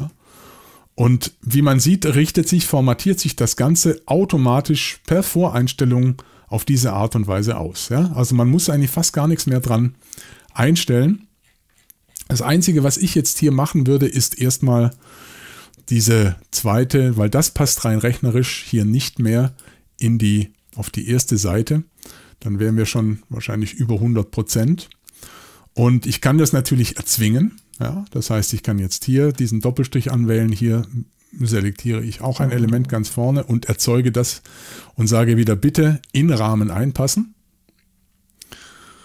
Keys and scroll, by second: 14.9 y.